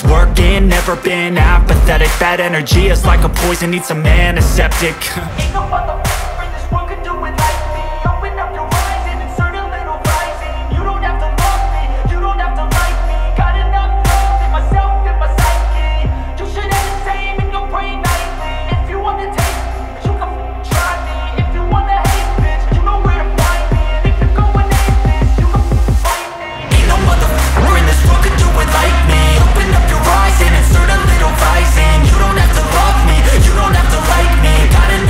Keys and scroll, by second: 0.1 F3, 0.4 Escape, 0.7 F3, 1.6 F2, 5.3 F3, 5.7 F2, 33.9 Escape.